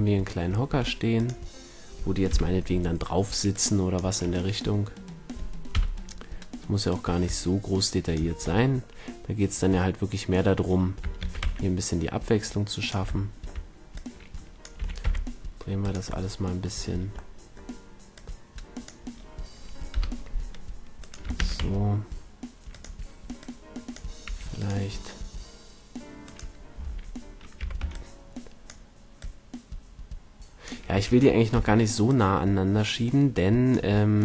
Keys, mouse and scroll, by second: 0.7 s, 1.6-2.2 drag, 2.3 KP_7, 3.0 click, 3.2-3.9 middle drag, 5.2 click, 5.7 KP_1, 6.9-9.2 drag, 11.2 shift+d, 12.9-14.5 drag, 14.8 r, 16.3-17.6 drag, 19.9 KP_7, 21.4 shift+d, 22.8-26.2 drag, 24.2 r, 26.2-27.2 middle drag, 27.2-28.0 right drag, 27.6 z, 27.8 b, 29.2-30.9 drag, 30.9 a, 31.5 b.